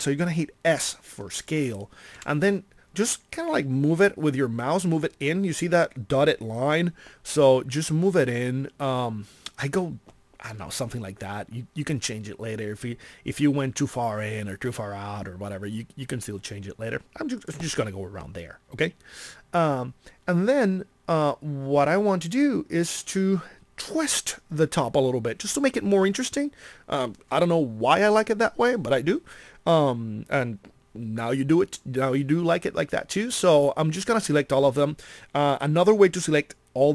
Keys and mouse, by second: 2.1 s, 17.5-19.7 drag.